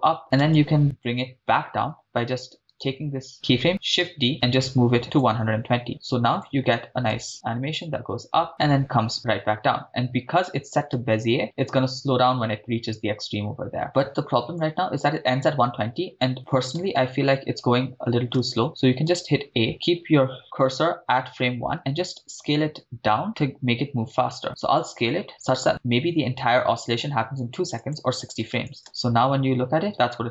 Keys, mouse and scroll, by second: 0.4 shift+space, 0.8-1.2 drag, 2.7 click, 2.7 right click, 3.8 shift+d, 5.1 click, 5.9 click, 7.1 shift+space, 10.9 shift+space, 13.8 shift+space, 14.6-16.2 drag, 16.8 shift+space, 18.4 shift+space, 19.1 a, 19.7 click, 22.2 s, 27.9 click, 28.8 shift+space.